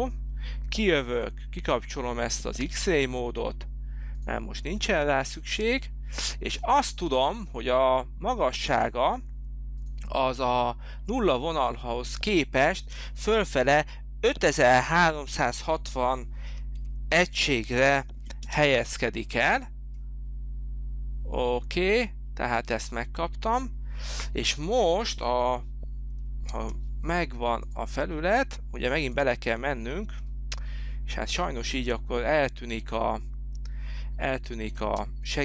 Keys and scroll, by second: 16.4 5, 16.8 3, 17.4 6, 17.8 0, 18.4 Return, 26.5 space, 27.1 space, 34.9 space.